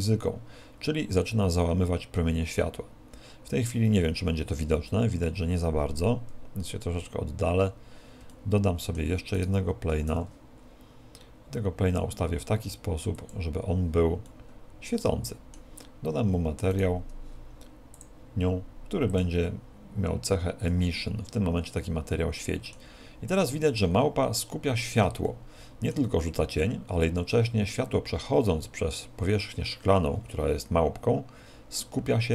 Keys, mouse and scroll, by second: 6.2-7.4 scroll down 6, 7.4-8.7 scroll down 2, 8.7 shift+middle click, 10.0 right click, 10.1 shift+d, 13.3 click, 14.3 middle click, 16.7 right click, 18.0 click, 19.1 click, 21.8 middle click, 23.3 middle click, 24.5-25.3 scroll up 3, 25.3 scroll up 1, 25.3 shift+middle click.